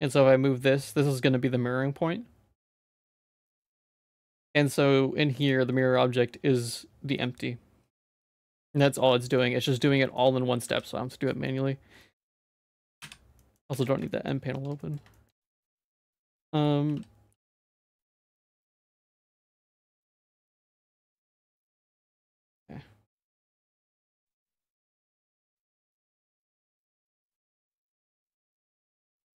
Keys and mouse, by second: 3.4 click, 4.0 ctrl+s, 5.4 click, 8.9 shift+middle click, 9.9 shift+middle click, 10.7 ctrl+s, 11.3 middle click, 12.0 middle click, 12.4 shift+middle click, 13.0 n, 13.4 middle click, 13.7 ctrl+s, 14.1 shift+middle click, 14.5 Tab, 14.8 middle click, 15.1 shift+middle click, 15.4 middle click, 15.9 shift+middle click, 16.8 g, 23.2 middle click, 24.1 shift+middle click, 24.9 middle click, 25.2 shift+middle click, 28.1 middle click, 28.4 shift+middle click, 29.0 middle click.